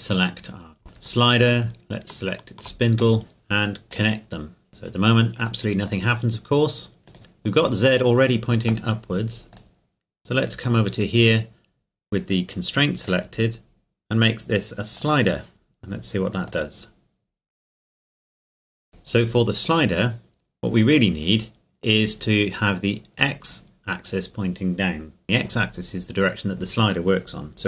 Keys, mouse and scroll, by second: 1.4 shift+right click, 3.9 click, 7.1 right click, 9.5 click, 13.0 click, 18.9-19.3 scroll down 1, 19.7 right click.